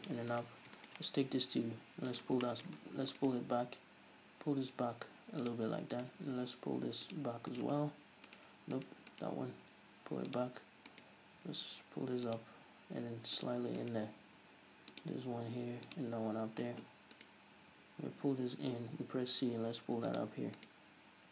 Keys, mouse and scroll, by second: 0.2 click, 0.4 right click, 0.9 shift+right click, 1.3 g, 2.3 click, 2.6 shift+middle click, 2.9-3.3 scroll down 2, 3.3 right click, 3.6 g, 5.6 click, 6.1 right click, 6.4 g, 7.3 click, 7.6 right click, 7.9 g, 8.9 right click, 9.2 right click, 9.6 g, 10.5 click, 11.0 right click, 11.6 g, 12.5 click, 12.6 g, 13.6 click, 13.9 right click, 14.3 g, 15.1 click, 15.2 g, 16.1 click, 17.3 right click, 17.7 g, 20.3 shift+click, 20.7 right click.